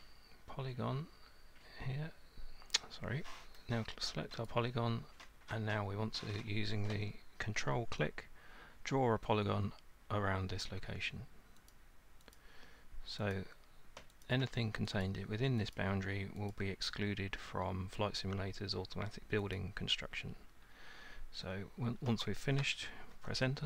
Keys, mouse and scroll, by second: 4.5 click, 10.8 click, 11.7 ctrl+click, 12.4 ctrl+click, 13.4 click, 14.3 ctrl+click, 15.1 ctrl+click, 15.8 click, 16.5 ctrl+click, 19.6 ctrl+click.